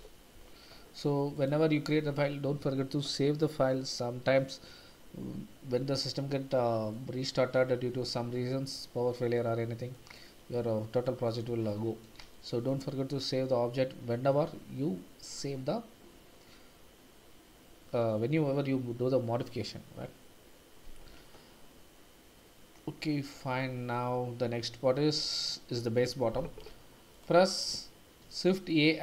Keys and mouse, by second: 6.9-8.7 middle drag, 9.4-9.9 middle drag, 10.3 middle drag, 11.0 middle drag, 11.8 shift+middle drag, 12.3 middle click, 28.2 shift+a.